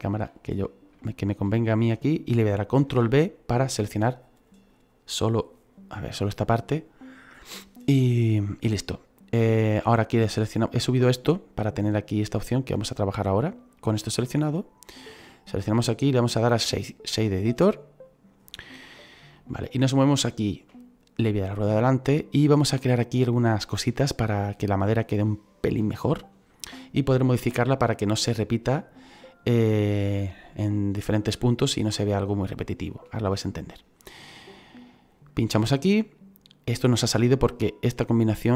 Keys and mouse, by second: 1.0 shift+middle click, 2.8 ctrl+b, 3.8 click, 12.3 click, 15.0 click, 17.7 click, 19.4 middle click, 32.8 middle click, 35.2 click, 37.2 shift+middle click.